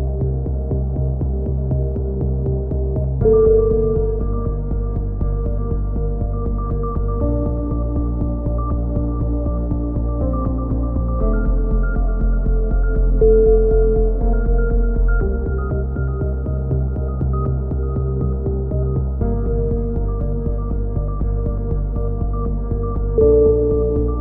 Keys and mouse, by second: 0.0 Tab, 0.5-1.5 drag, 1.9 z, 2.4 z, 7.0 ctrl+r, 9.5 a, 10.0 z, 10.2 c, 11.9 click, 12.1 s, 14.2 a, 14.4 z, 14.6-16.5 drag, 15.1 Tab, 19.8 KP_3, 20.3 click, 20.7 Tab, 21.3 z, 22.9 z, 23.1 z.